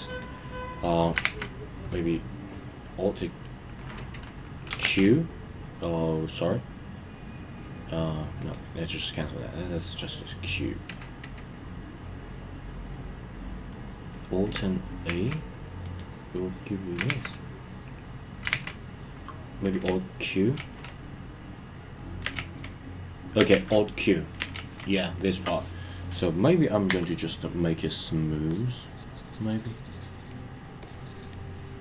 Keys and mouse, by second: 1.2 super+a, 4.8 ctrl+q, 15.1 alt+a, 17.1 super+a, 18.5 super+a, 20.6 alt+q, 22.4 alt+q, 23.7 alt+q, 24.6 alt+q, 26.9 s, 28.5 click, 30.8 click.